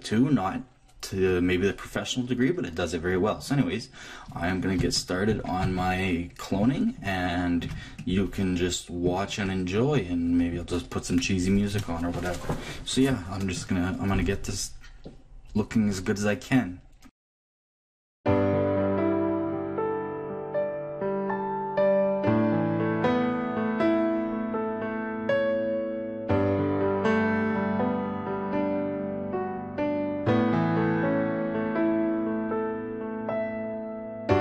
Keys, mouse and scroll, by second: 3.3 click, 8.8 ctrl+click, 17.2 click, 18.6 click, 18.9 click, 19.5 click, 20.3 middle click, 20.7 click, 21.2 click, 21.7 click, 22.4 click, 22.8-23.9 drag, 24.4 click, 24.7 click, 25.1 click, 25.6 click, 26.3 click, 26.8 click, 27.0 click, 27.8 middle click, 28.2 click, 28.9 middle click, 29.3 click, 30.0 click, 30.4 middle click, 31.2 click, 31.9 click, 32.3 click, 33.1 middle click, 33.3 click, 33.9 click.